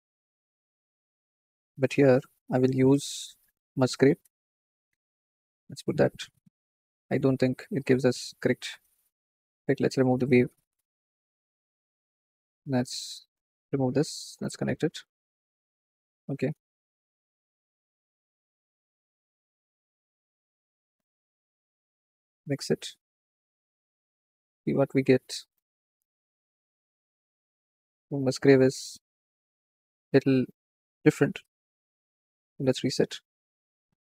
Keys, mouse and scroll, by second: 1.4-4.3 middle drag, 4.3 click, 4.7 shift+a, 5.2 shift+a, 9.4 click, 10.0-11.4 alt+drag, 11.6 click, 12.2 drag, 13.4-15.2 alt+drag, 18.1-21.1 drag, 22.1-23.9 drag, 24.6 scroll down 4, 28.2-30.1 drag, 30.5 ctrl+z, 31.0-34.0 drag.